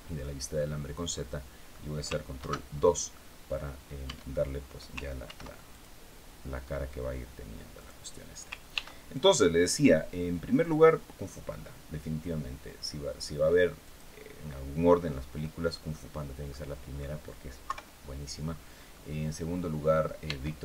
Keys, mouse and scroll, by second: 0.2-1.5 middle drag, 2.0 ctrl+2, 3.8 Tab, 4.9 ctrl+r, 5.4 ctrl+click, 7.4 click, 8.4 ctrl+r, 8.8 ctrl+click, 13.5 click, 15.1 middle click, 15.8-16.1 scroll down 2, 16.1 middle click, 17.3 KP_3, 18.2-18.8 scroll up 2, 18.9 scroll down 2, 19.9 Tab.